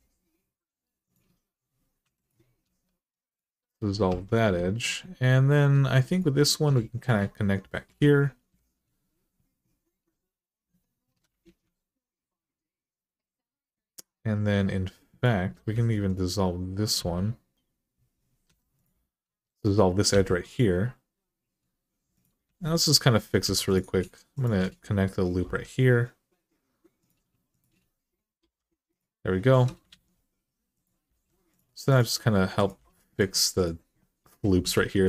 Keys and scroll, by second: 1.8-2.4 typing, 3.9 1, 7.7 j, 11.2 alt+z, 15.5 x, 16.7 x, 18.2 2, 19.9 x, 25.2 j, 28.2 j, 29.7 alt+z, 30.8 g, 32.5 g, 34.5 g.